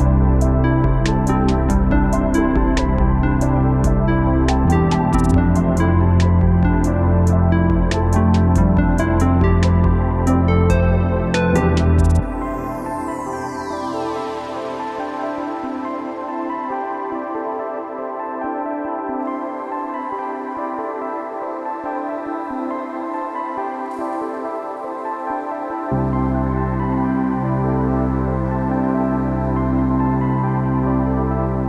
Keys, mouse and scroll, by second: 1.1-4.6 typing, 1.2 click, 1.8 click, 1.9 click, 2.6 click, 3.1 click, 3.6 click, 4.2 click, 4.8 click, 5.9 space, 6.1 click, 6.3 ctrl+click, 6.9 space, 7.1 click, 8.2 space, 8.4 click, 8.7 ctrl+z, 9.2 alt+click, 9.5 click, 9.6 space, 9.8 click, 10.0 alt+click, 10.7-14.8 typing, 10.8 click, 11.4 click, 12.2 click, 12.9 click, 13.2 click, 14.0 click, 14.1 ctrl+z, 14.4 ctrl+z, 14.5 click, 14.9 click, 15.4 click, 15.9-20.4 typing, 16.1 ctrl+z, 17.0 click, 17.6 click, 17.7 ctrl+z, 18.1 click, 18.5 click, 19.1 click, 19.6 click, 20.2 ctrl+click, 20.6 click, 21.2 ctrl+alt+z, 21.3 alt+click, 21.6 space, 21.7 click, 22.3 click, 22.4 alt+space, 22.5 alt+click, 22.9 click, 23.8 space, 24.0 click, 24.8 ctrl+z, 25.0 click, 25.3 click, 25.5 ctrl+z, 25.6 alt+click, 25.8 space, 26.0 ctrl+click, 26.8 space, 26.8 ctrl+z, 27.1 click, 27.4 click, 27.7 space, 27.9 ctrl+z, 28.1 ctrl+click, 28.2 space, 28.8 click, 28.9 click, 29.6 space, 29.7 click, 29.8 ctrl+z, 30.5 click, 30.7 space, 30.9 click, 31.1 space, 31.2 click, 31.4 space, 31.5 click, 31.6 space.